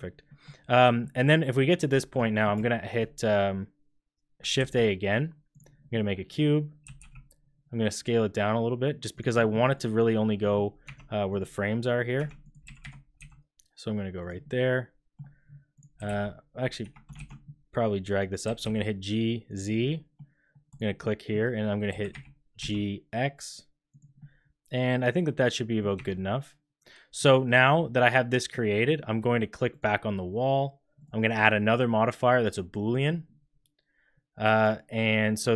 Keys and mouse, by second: 0.2 middle click, 0.9 click, 1.4 drag, 1.9 shift+middle drag, 2.2 middle drag, 4.5 shift+a, 5.9-6.3 drag, 6.8 s, 9.3 shift+drag, 10.4 click, 10.8 Tab, 11.2 click, 12.1 3, 12.6 g, 14.4 click, 15.9 h, 16.0 x, 17.1 ctrl+z, 18.4 g, 19.7 middle click, 19.9 click, 20.6 click, 21.0 click, 21.9 g, 24.1-25.2 middle drag, 25.2 click, 25.9 Tab, 28.5 middle click, 29.7 click, 31.1-32.9 drag.